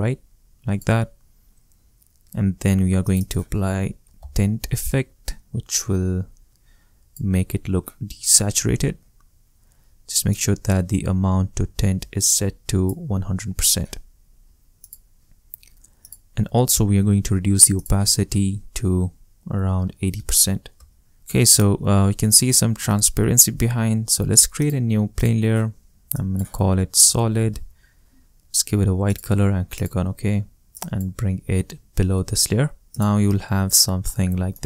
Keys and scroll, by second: 3.5-4.8 typing, 19.7 8, 20.1 0, 20.7 Return, 26.5-28.0 typing.